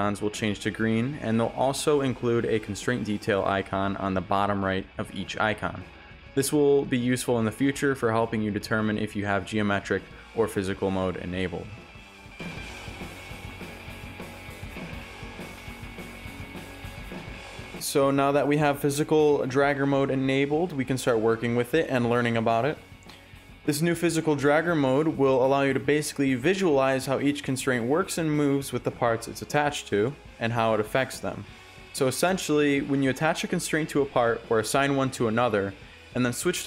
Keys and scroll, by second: 1.8 ctrl+z, 5.0 a, 5.6 w, 6.7-8.0 typing, 9.0 shift+a, 10.5-11.4 typing, 11.5 Return, 13.7-15.5 typing, 15.6 Return, 17.5-19.0 typing, 20.2 shift+s, 23.9 s, 26.4 ctrl+z, 33.5 6, 33.6 Return, 35.4 5, 35.5 Return.